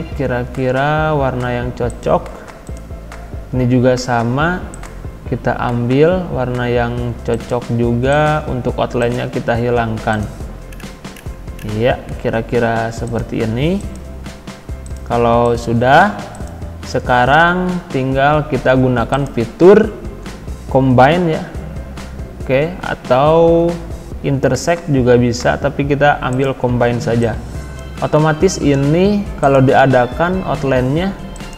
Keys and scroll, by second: 28.1 ctrl+z.